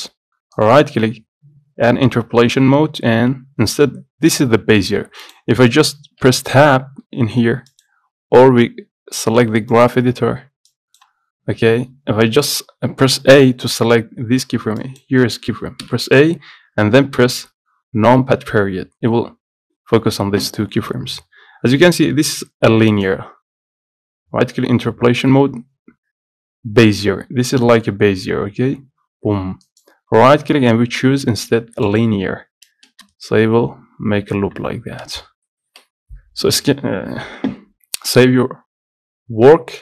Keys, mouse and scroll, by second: 0.7-3.6 right drag, 10.9 click, 11.4-11.7 scroll down 11, 14.4 a, 14.9 click, 15.9 a, 17.6 KP_Decimal, 18.7 scroll down 1, 23.0-33.0 right drag, 33.0 space, 35.1 space, 35.8 ctrl+s.